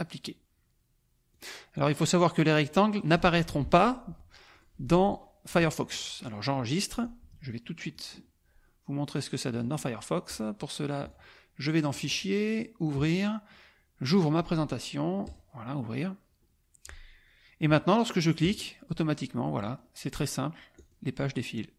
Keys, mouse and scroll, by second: 1.4 click, 1.7 click, 2.3 click, 2.7 click, 3.1 click, 4.5 click, 5.1 click, 5.9 click, 6.9 click, 7.9 click, 9.5 click, 10.3 right click, 11.1 click, 11.9 click, 12.8 click, 14.1 click, 15.2 click, 18.4 click, 19.6 click, 20.7 click.